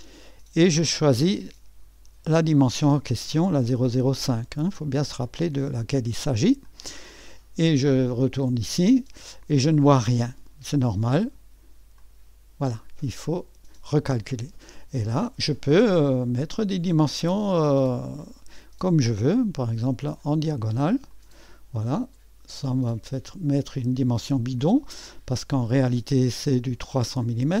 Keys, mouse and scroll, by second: 3.6 click, 5.2 click, 6.6 click, 8.4 click, 8.8 click, 12.0 click, 18.0 click, 21.1 click, 22.5-23.5 drag, 24.6-25.4 scroll down 2, 25.4-26.5 scroll down 1, 26.5-27.6 scroll down 1.